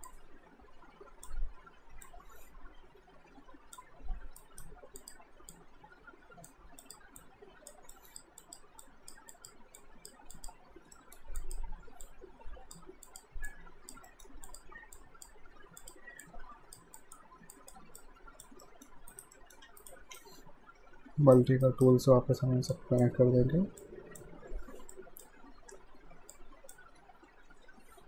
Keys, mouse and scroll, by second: 0.1 click, 4.4 alt+right click, 5.0 click, 11.0 alt+middle click, 11.4 click, 14.1 middle click, 14.5 click, 18.6 middle click, 19.1 alt+right click, 19.4 alt+middle click, 19.7 q, 19.8 right click, 20.2 shift+right click, 21.7 alt+right click, 22.7 click, 27.3 ctrl+z.